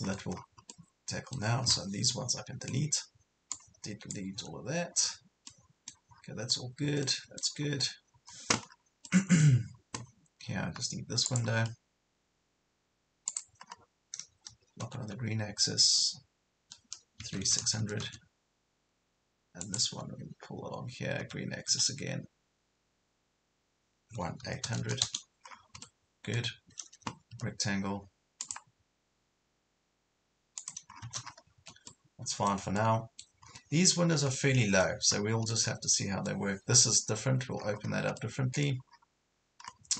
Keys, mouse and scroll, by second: 0.1 scroll down 1, 0.7 middle click, 2.1 scroll down 1, 2.1-3.5 middle drag, 3.5 click, 4.3 Delete, 4.9 scroll down 1, 5.5 middle click, 6.1 scroll up 1, 7.1 middle click, 7.7 scroll up 1, 8.7 scroll down 1, 9.1 middle click, 9.6 scroll up 1, 11.3 click, 13.7 scroll up 1, 14.8 Left, 17.2 KP_3, 17.5 KP_6, 19.6 click, 21.2 Right, 21.7 Left, 24.1 KP_1, 24.5 KP_8, 25.5 scroll down 1, 25.9-27.1 middle drag, 27.3 r, 28.5 click, 30.9 scroll down 1, 31.5 scroll down 1, 31.6 Escape, 31.9-33.5 middle drag, 33.5 scroll up 1, 34.0 scroll down 1, 34.3 middle click, 35.1 scroll up 1, 35.5 middle click, 37.1 scroll up 1, 37.6 scroll down 1, 37.7 scroll up 1, 37.9 scroll down 1, 38.2 middle click, 38.9 scroll down 1, 39.3 scroll up 1.